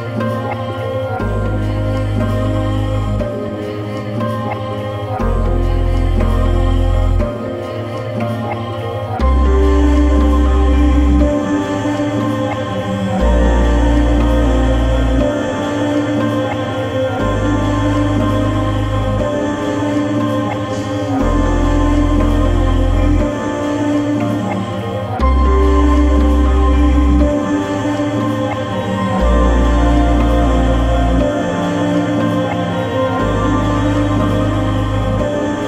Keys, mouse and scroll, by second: 0.9-5.5 drag, 5.5-7.6 middle drag, 9.6-13.9 drag, 13.9-18.3 right drag, 18.3 r, 18.4 a, 19.3-21.7 right drag, 21.7-24.1 drag, 24.1-28.3 right drag, 28.3 d, 28.4 r, 28.6 o, 28.7 p, 30.1-31.9 typing, 32.3 Return, 34.6 click, 35.2-35.6 middle drag.